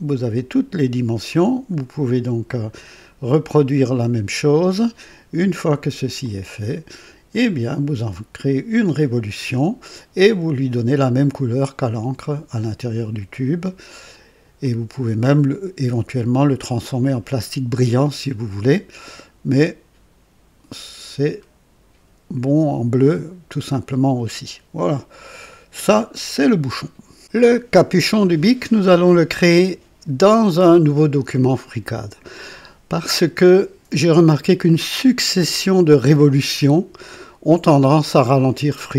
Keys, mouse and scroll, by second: 4.5 click, 6.1 click, 8.6 click, 13.8 click, 14.6-17.5 drag, 19.0-25.5 drag.